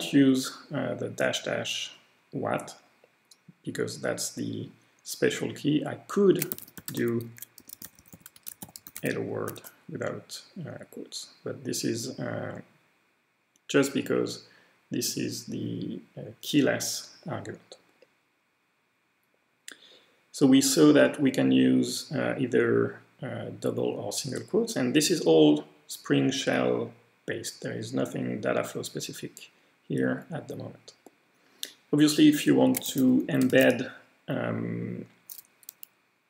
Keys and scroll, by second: 6.1-9.5 typing, 9.6 Return, 32.4-33.7 typing, 35.4 typing.